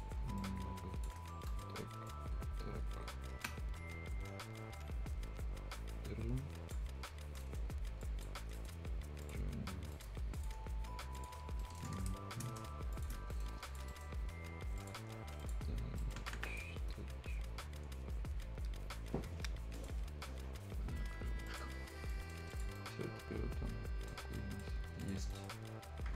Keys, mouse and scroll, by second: 1.3 shift+scroll up 1, 1.5 shift+right click, 2.1-6.9 shift+drag, 6.9-7.3 scroll up 1, 7.4 right click, 7.7 scroll up 1, 7.8 scroll down 1, 8.0 click, 8.5 right click, 8.7 right click, 9.2 click, 9.5 scroll up 1, 9.9 right click, 10.1 scroll down 1, 10.3 click, 11.4 scroll down 1, 11.6 right click, 12.0 Return, 12.9 shift+click, 13.2 scroll up 1, 13.3 right click, 13.6 click, 13.9 right click, 14.1 scroll up 1, 14.8 click, 15.0-15.4 scroll up 1, 15.4 click, 15.7-16.0 scroll down 1, 16.0 right click, 16.2 Escape, 16.5 click, 16.8 middle click, 16.8 scroll up 1, 19.8 click, 21.8 scroll down 1, 22.0 scroll up 1, 22.1 right click, 22.5 click, 22.8-24.3 right drag, 24.3 scroll up 1, 24.3 right click, 25.0 click, 25.3 right click.